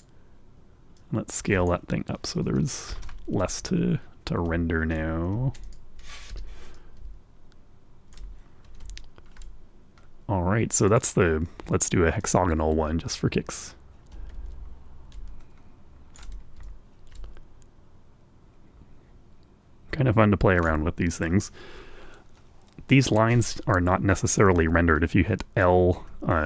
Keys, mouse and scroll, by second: 1.0 click, 2.2-3.2 drag, 3.8 Return, 5.0-5.3 scroll down 1, 5.4 scroll up 1, 6.0-6.3 ctrl+scroll down 1, 7.3 Escape, 8.0-9.6 ctrl+drag, 9.8 scroll up 2, 10.0-10.6 scroll down 1, 10.6 ctrl+scroll up 1, 12.1 click, 13.5 right click, 14.9-17.6 drag, 17.9 ctrl+click, 18.0-22.1 ctrl+right drag, 25.7 l.